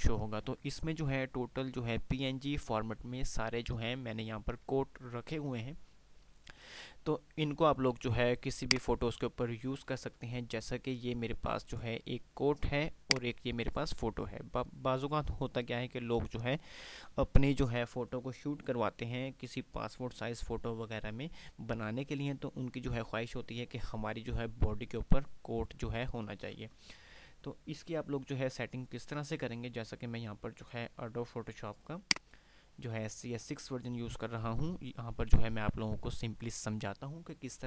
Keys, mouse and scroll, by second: 6.3 F5, 6.3 typing, 8.6 click, 9.6 click, 10.2 click, 12.8 click, 14.1 click, 32.6 click, 32.6 typing, 34.1 typing.